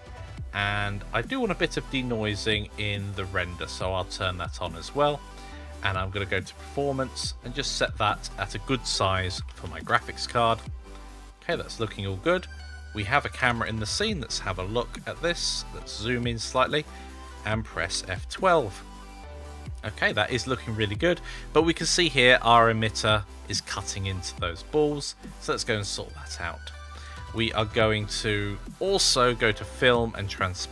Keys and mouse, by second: 1.1 click, 2.5 click, 3.1-3.7 drag, 6.2 click, 7.6-10.3 drag, 13.2 KP_0, 14.2 shift+`, 18.0 F12, 26.0 click, 28.7 click, 30.0 click.